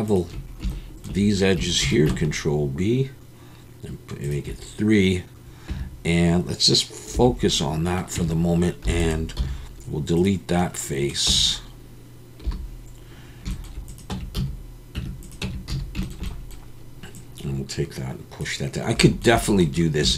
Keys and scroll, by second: 1.8 ctrl+b, 5.7 Tab, 7.1 /, 8.1 Tab, 8.8 3, 9.4 x, 11.3 Tab, 12.4 /, 14.1 Tab, 14.3 a, 14.9 Tab, 15.4 Tab, 15.7 a.